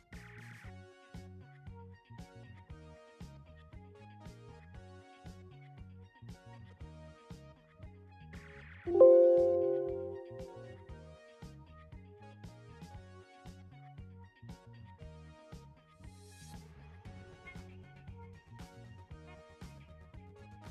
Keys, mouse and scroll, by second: 5.8 click, 16.2-19.0 typing.